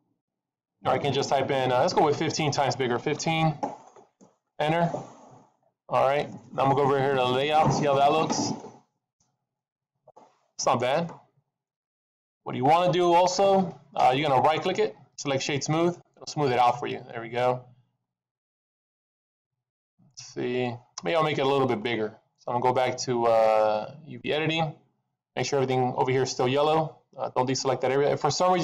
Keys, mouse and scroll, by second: 7.9 click, 8.5-9.1 scroll up 3, 9.1-9.9 scroll down 4, 9.5 middle click, 12.2 middle click, 14.4 right click, 16.7 middle click, 17.6-18.0 scroll up 4, 18.7-19.1 scroll down 3, 19.1 middle click, 20.0 middle click.